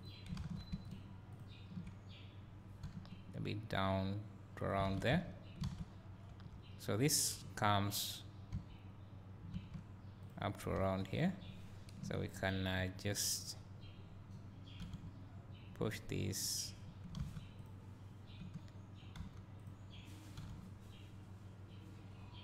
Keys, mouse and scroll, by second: 0.0 click, 0.4 alt+a, 0.9 alt+click, 3.0 g, 4.7 click, 4.9 alt+a, 5.7 alt+a, 6.4 2, 7.2 click, 7.6 scroll down 1, 8.5 scroll, 8.6 scroll down 1, 10.3 click, 10.9 1, 11.2 click, 11.9 KP_Decimal, 12.7-13.5 scroll up 2, 13.5-14.9 scroll down 2, 14.9 g, 16.3 click, 17.2 alt+a, 17.6 click, 19.2 w, 19.6 click, 20.7 g.